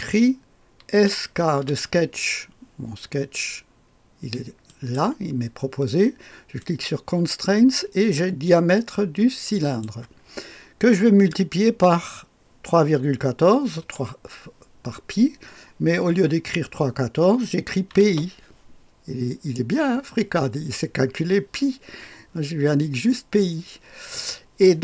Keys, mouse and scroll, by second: 0.9-2.1 typing, 4.7 click, 6.6 click, 9.6 click, 13.8 typing, 17.6-18.6 typing.